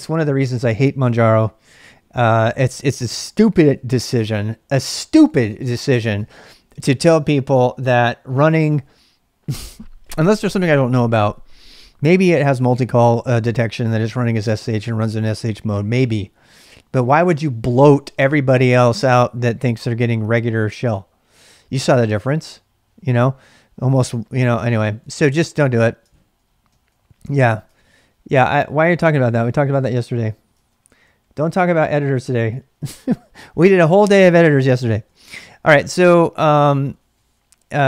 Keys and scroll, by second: 3.6 ctrl+[, 3.7 j, 4.0 j, 4.7 ctrl+[, 4.9 j, 5.1 j, 6.2 ctrl+[, 6.2 ctrl+j, 13.5-14.3 typing, 16.5 ctrl+[, 16.6 ctrl+j, 23.7-28.4 typing, 24.8 ctrl+j, 30.6 ctrl+[, 30.7 j, 30.9 j, 31.0 j, 32.2 ctrl+[, 32.2 ctrl+j, 34.9-37.8 typing.